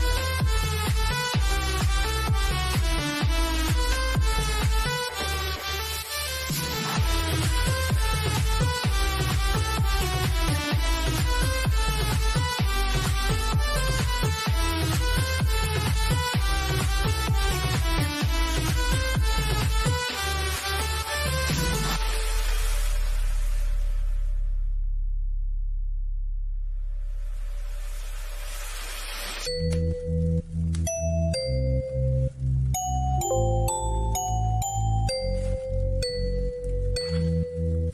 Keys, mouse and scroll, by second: 0.8 middle click, 1.2-5.2 shift+middle drag, 5.2 click, 5.9-6.5 scroll down 1, 7.7 click, 8.4-8.7 scroll down 1, 9.7 click, 14.2 click, 36.2-37.9 scroll down 1.